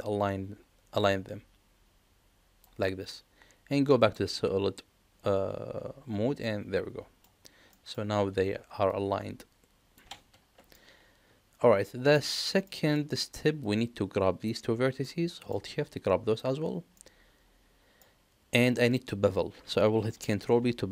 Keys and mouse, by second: 4.0 click, 6.4 middle click, 7.7 middle click, 10.7-12.1 middle drag, 12.7 middle click, 13.6 click, 15.0 middle click, 15.9 shift+click, 16.9-17.9 middle drag, 20.2 ctrl+b.